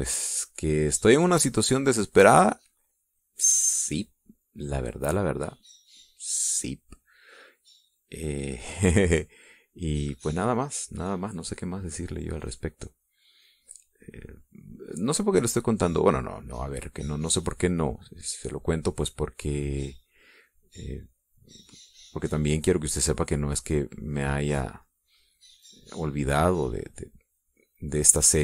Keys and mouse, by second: 1.3 click, 4.3-7.4 drag, 8.3-12.9 drag, 13.2 middle click, 14.1 middle click, 16.5-20.6 drag, 21.0-25.2 drag, 26.1 click, 27.4-28.4 drag.